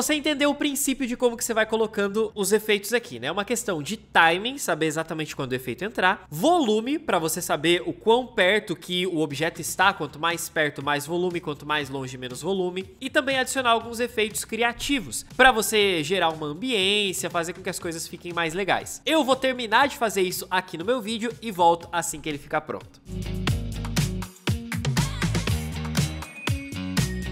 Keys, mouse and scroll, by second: 23.1-27.3 typing, 23.3 Left, 25.3 ctrl+shift+d, 25.6 alt+click, 25.7 ctrl+shift+d, 26.6 ctrl+middle click, 26.6 ctrl+scroll.